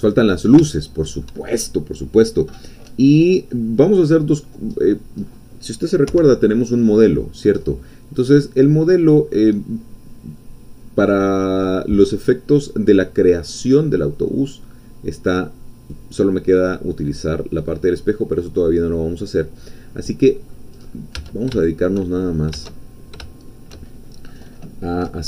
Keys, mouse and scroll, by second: 0.1-0.6 scroll up 1, 0.7-1.8 shift+middle drag, 4.8 scroll down 2, 5.2 scroll up 2, 6.2 1, 6.8-7.6 scroll down 2, 7.6-8.2 scroll up 2, 8.2-11.0 scroll down 2, 11.0-11.6 scroll down 1, 11.6-17.7 scroll down 1, 17.7-19.2 drag, 19.2-19.6 scroll down 1, 19.6-20.6 drag, 20.8-21.1 scroll up 1, 21.2 Tab, 21.6 shift+click, 22.2-22.5 shift+scroll up 1, 22.9 shift+scroll down 2.